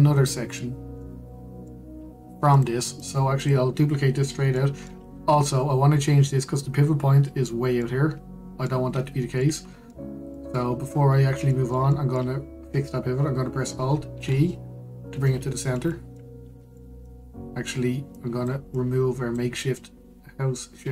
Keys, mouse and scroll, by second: 0.1-3.2 shift+middle drag, 3.2 click, 3.7 click, 4.1 click, 5.2-6.1 middle drag, 6.1-8.5 scroll up 1, 8.5-9.7 middle drag, 9.7-10.1 scroll down 1, 10.1-11.6 middle drag, 11.6-12.2 scroll down 1, 12.2-14.8 middle drag, 14.8 alt+g, 16.4-17.0 middle drag, 17.0-17.4 scroll up 1, 17.4-18.8 shift+middle drag, 18.8 click, 19.4 click.